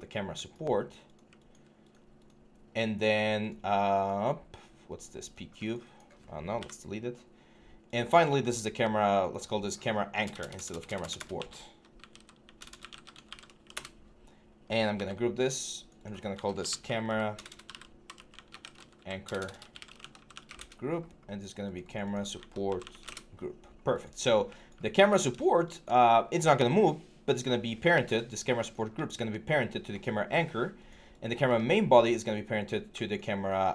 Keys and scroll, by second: 6.4 Delete, 10.0-13.1 typing, 13.5 Return, 14.7 ctrl+g, 16.2-20.7 typing, 22.5 typing, 22.8 Return.